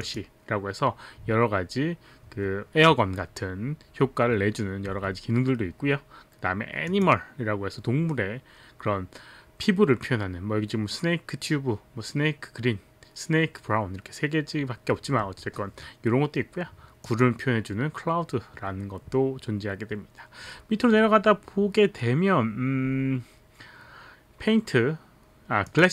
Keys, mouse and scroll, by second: 0.0 click, 6.9 click, 17.1 click, 25.7 click.